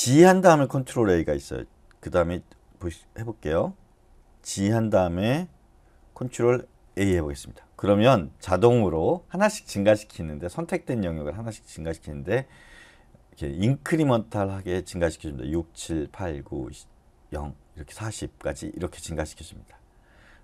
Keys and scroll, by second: 4.3 typing, 6.8 ctrl+a.